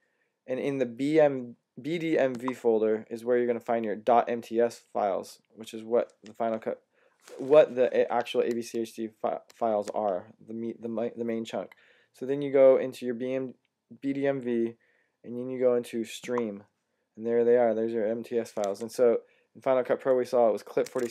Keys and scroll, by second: 18.5 Tab, 20.7 super+Tab.